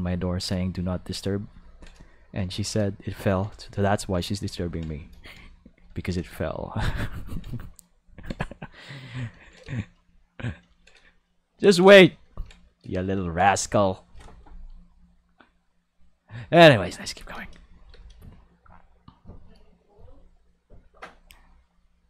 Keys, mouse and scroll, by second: 0.2 ctrl+middle click, 0.6 shift+middle click, 1.2 shift+middle click, 1.6 ctrl+middle click, 2.5 ctrl+middle click, 2.8 shift+middle click, 3.3 ctrl+middle click, 3.6 shift+middle click, 4.0 ctrl+middle click, 4.3 shift+middle click, 4.6 ctrl+middle click, 4.9 shift+middle click, 5.4 shift+middle click, 6.0 ctrl+middle click, 6.3 shift+middle click, 6.8 shift+middle click, 7.6 shift+middle click, 8.0 ctrl+middle click, 8.4 shift+middle click, 11.6 ctrl+middle click, 12.3 ctrl+middle click, 12.9 middle click, 13.3 ctrl+middle click, 13.6 shift+middle click, 17.0 click, 17.3 space, 17.9 space, 18.0-19.6 drag, 20.9 click, 21.9 click.